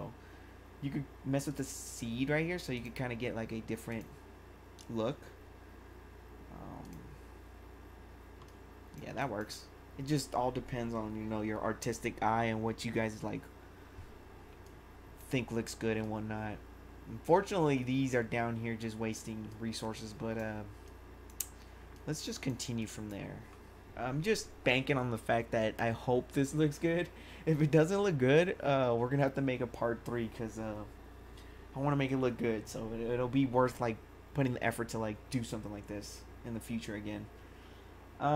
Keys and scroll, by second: 9.1 1.